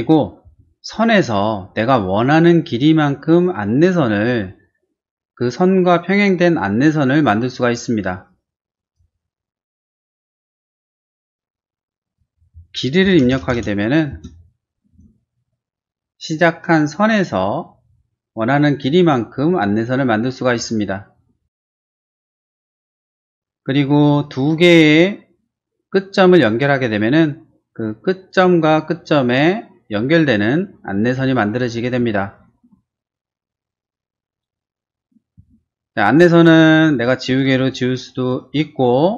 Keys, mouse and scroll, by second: 0.0 middle click, 0.4 t, 2.2 click, 8.9 click, 10.5 click, 12.0 click, 12.8-14.8 typing, 14.1 Return, 23.1 t, 24.1 click, 26.3 click, 31.7 scroll down 1, 32.2 shift+middle click, 34.9 space, 36.8 click, 37.6 click, 38.4 click.